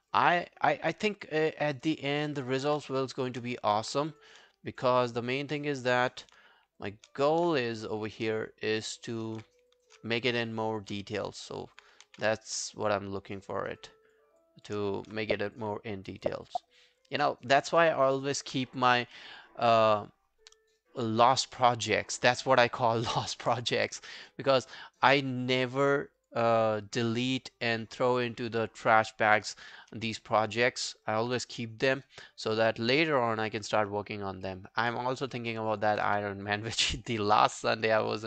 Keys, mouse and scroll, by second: 0.5 alt+scroll down 1, 0.7 alt+click, 1.4 alt+middle click, 1.7 alt+right click, 1.9 alt+click, 2.3 alt+right click, 2.5 alt+click, 3.0 shift+click, 3.2 shift+click, 3.5-4.0 scroll down 2, 4.7 shift+click, 5.1 shift+click, 6.1 alt+click, 6.9 shift+click, 7.2 alt+click, 8.1 shift+click, 8.4 alt+click, 9.0 alt+right click, 9.2 alt+click, 9.8 shift+click, 10.1 alt+click, 10.6 shift+click, 10.7 shift+click, 11.1 alt+click, 11.6 alt+click, 12.1 ctrl+z, 12.4 alt+click, 12.9 shift+click, 13.8 shift+click, 14.9 alt+click, 16.2 shift+click, 18.0 alt+click, 30.3 alt+scroll down 1, 30.6 alt+middle click, 30.8 alt+right click, 31.1 alt+click, 31.4 right click, 32.5 double click, 32.8 alt+scroll down 2, 33.0 alt+middle click, 33.2 alt+right click, 33.4 alt+click, 33.7 alt+middle click, 33.9 alt+right click, 34.1 alt+click, 34.5 alt+middle click, 34.7 alt+right click, 35.0 alt+click, 35.3 alt+middle click, 35.5 alt+right click, 35.7 alt+click, 36.1 q, 36.3 right click, 37.2 alt+click.